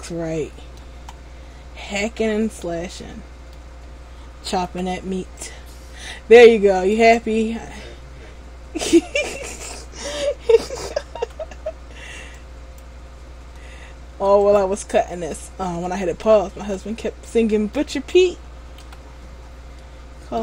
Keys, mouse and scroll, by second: 4.8 c, 7.3 right click, 7.5 middle click, 11.3 c, 14.7 right click, 15.1 middle click, 17.1 scroll down 2, 17.4 middle click, 18.9 c.